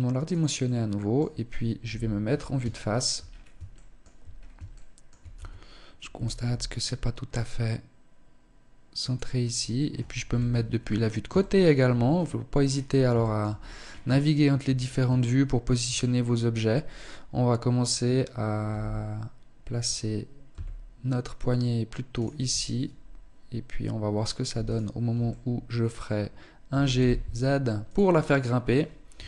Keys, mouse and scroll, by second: 0.0 middle click, 1.2 KP_1, 2.2 shift+middle click, 2.5-2.9 scroll up 4, 2.9 shift+middle click, 3.3-4.0 scroll up 2, 3.8 shift+middle click, 4.5 Tab, 5.8 g, 8.5 g, 9.7 KP_3, 10.1-10.7 scroll down 2, 10.7 scroll down 2, 10.9 shift+middle click, 11.5-12.0 scroll down 1, 12.0-12.9 scroll down 5, 12.9 shift+middle click, 13.1-13.5 scroll up 8, 13.7 shift+middle click, 14.2 scroll up 2, 14.9 shift+scroll down 2, 18.1 g, 21.7 Tab, 24.1 alt+right click, 24.6 middle click, 26.1 g, 27.5-27.9 scroll down 5, 28.5 KP_1, 29.1-29.2 scroll down 1.